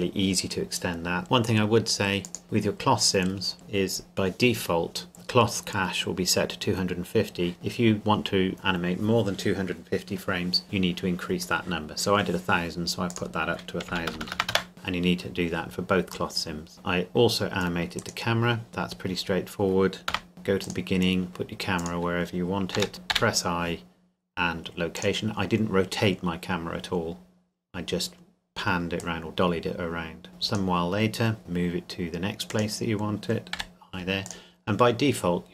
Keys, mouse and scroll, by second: 1.2 click, 3.5 right click, 5.1 click, 13.1 click, 13.9 KP_1, 14.1 KP_0, 14.5 KP_Enter, 16.7 Escape, 18.0 right click, 18.7 scroll down 1, 20.1 KP_0, 20.6 click, 21.3 g, 21.8 click, 22.7 g, 22.9 click, 23.1 i, 24.9 click, 27.8-28.6 scroll down 1, 29.0 click, 30.9-31.4 scroll down 1, 31.4 g, 32.5 click, 34.3 click.